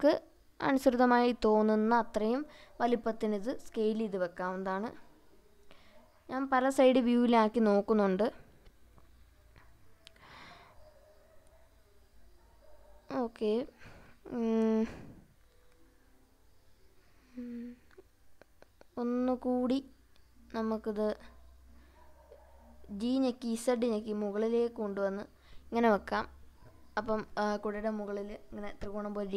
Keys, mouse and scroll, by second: 3.4 click, 4.7 click, 5.9-6.3 scroll up 2, 7.4-8.3 shift+middle drag, 8.6-17.0 middle drag, 18.6 click, 20.0-21.7 scroll up 6, 23.0 g, 23.5 z, 25.7 click, 26.1 scroll down 2, 26.8-27.2 scroll down 2, 27.5 scroll down 1.